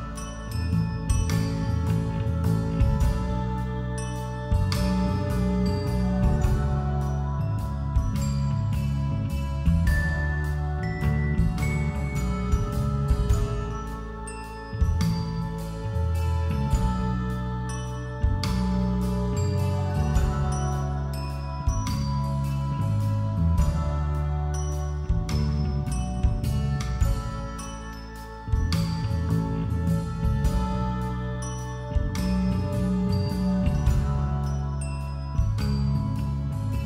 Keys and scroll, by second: 0.0-0.8 typing, 16.1 [, 16.4 ctrl+-, 17.6 [, 20.0 ], 20.9 [, 22.3-24.1 typing, 27.2-31.3 typing, 32.3 ctrl+-, 34.6 ], 35.5 [, 35.9 ], 36.6 [.